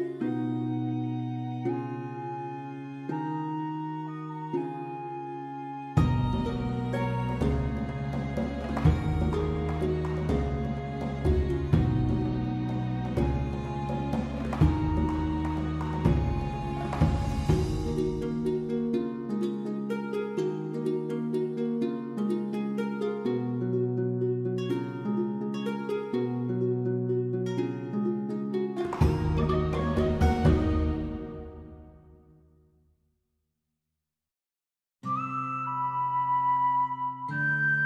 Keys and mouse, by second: 0.2 middle click, 0.5 middle click, 0.8 click, 1.1 alt+middle click, 1.2 alt+middle click, 1.6 g, 1.7 g, 2.0 right click, 2.2 g, 2.9 click, 3.6 g, 4.0 click, 4.4 alt+z, 4.6 click, 4.8 alt+click, 5.5 click, 5.5 g, 5.9 click, 6.2 g, 6.4 click, 6.6 r, 7.1 right click, 7.4 shift+middle click, 7.7 alt+z, 7.8 middle click, 8.2 alt+middle click, 8.4 click, 8.7 r, 9.0 click, 9.7 click, 9.7 g, 10.0 click, 10.4 alt+z, 11.0 alt+z, 11.0 g, 11.5 click, 11.7 click, 12.0 g, 12.2 right click, 12.4 g, 12.6 g, 12.8 click, 13.1 middle click, 13.6 middle click, 14.0 middle click, 14.5 alt+shift+z, 14.5 middle click, 14.8 middle click, 15.2 click, 15.3 alt+z, 16.1 2, 16.1 click, 16.3 alt+click, 16.4 alt+click, 17.0 click, 17.2 click, 17.4 middle click, 17.5 middle click, 17.7 g, 18.2 click, 18.6 middle click, 18.7 middle click, 19.3 alt+middle click, 19.7 shift+middle click, 20.1-21.2 middle drag, 21.3 middle click, 21.5 middle click, 22.1 middle click, 22.3 shift+middle click, 22.6 middle click, 22.9 shift+middle click, 23.0 middle click, 23.4 1, 23.5 click, 24.1 g, 24.3 click, 24.7 g, 25.6 click, 25.9 middle click, 26.6 shift+middle click, 26.7 middle click, 27.4 shift+middle click, 27.7 middle click, 28.7 k, 29.7 k, 31.4 middle click, 31.7 middle click, 32.4 middle click, 32.7 middle click, 33.2 click, 33.3 middle click, 33.8-36.8 typing, 34.2 click, 35.1 click, 35.3 click, 35.7 right click, 36.4 click, 37.0 click.